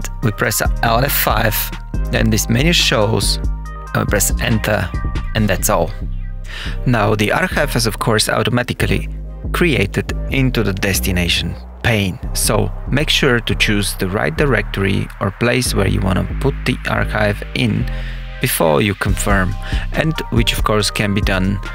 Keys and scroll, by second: 0.6 alt+F5, 1.4 Return.